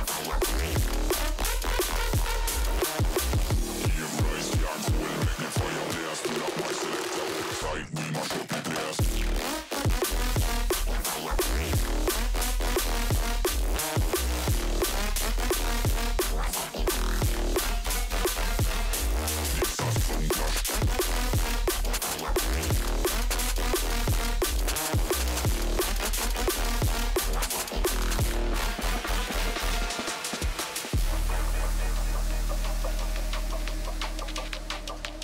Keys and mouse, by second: 2.5-3.5 drag, 3.1 KP_1, 5.8-7.2 drag, 9.9-11.1 drag, 13.4-14.4 drag, 14.4 KP_3, 17.4 s, 20.5 s, 20.6 s, 23.2-26.2 shift+drag, 28.2-29.7 shift+drag, 31.0-32.4 middle drag, 32.6-33.7 middle drag, 34.1-35.2 shift+middle drag.